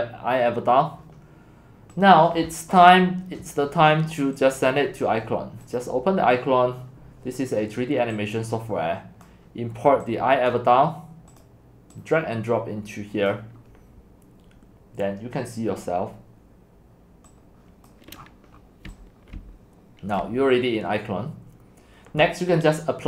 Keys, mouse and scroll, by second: 0.3-1.4 drag, 2.1-4.0 drag, 5.8 click, 8.9 click, 17.3 click, 17.9 right click, 18.2 middle click, 18.3 scroll down 1, 18.4 scroll down 1, 18.5 scroll, 18.5 scroll down 1, 18.6 scroll, 18.7 scroll down 1, 18.9-20.7 typing, 20.3 right click, 20.5-22.7 middle drag, 20.5-21.1 scroll.